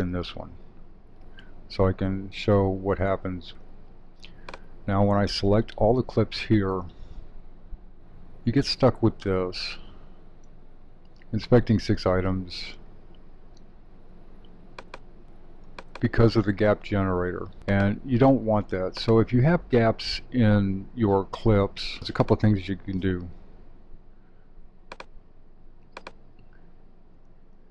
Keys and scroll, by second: 1.3 alt+w, 5.7 super+a.